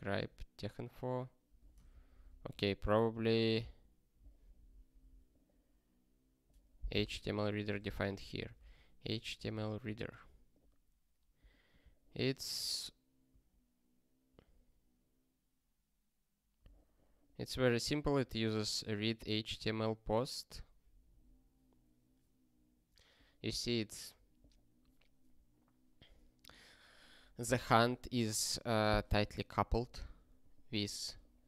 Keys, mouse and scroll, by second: 1.9 ^, 3.3 ctrl+n, 3.7 Return, 4.4 scroll down 1, 8.1-8.9 typing, 9.3 ctrl+n, 11.6 click, 13.3 ctrl+a, 18.6 click, 31.2 click.